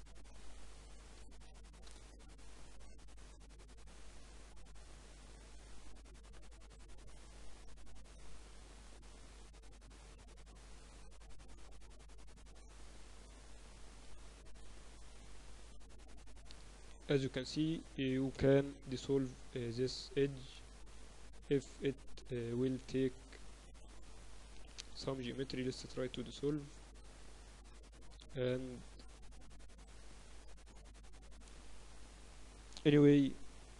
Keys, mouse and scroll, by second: 0.1 Tab, 0.4 Tab, 0.4-1.7 middle drag, 0.8 Tab, 1.3 Tab, 2.4 shift+d, 3.4 m, 5.9-9.5 right drag, 8.9-10.8 drag, 9.5 Tab, 9.8 Tab, 10.5 KP_Divide, 10.9 Tab, 11.5 a, 11.7 a, 12.0 a, 12.4 w, 14.6-17.6 typing, 15.0-16.8 right drag, 18.3-20.6 middle drag, 19.7 x, 22.7 Tab, 23.5 Tab, 23.8 Tab, 24.2 Tab, 25.6 x, 27.6 Tab, 28.8 Tab, 28.9 Tab, 29.4 Tab, 31.5 Tab, 32.1 Tab, 32.5 ctrl+r.